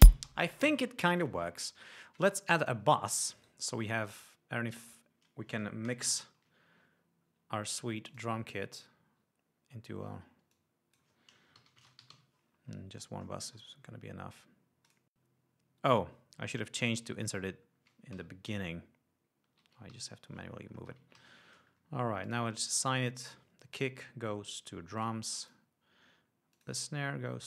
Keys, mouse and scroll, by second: 0.6 space, 3.0 click, 3.8 right click, 5.2 click, 6.7 ctrl+shift+n, 8.5 click, 10.4 scroll down 2, 10.9 click, 11.8-13.0 typing, 13.6-14.2 scroll down 2, 15.3 click, 17.2-17.7 scroll down 2, 17.7-18.1 scroll up 2, 18.5 ctrl+Up, 20.3 ctrl+Down, 21.5 ctrl+Up, 22.6 click, 24.1 click, 25.4 click, 25.8 click, 26.9 click.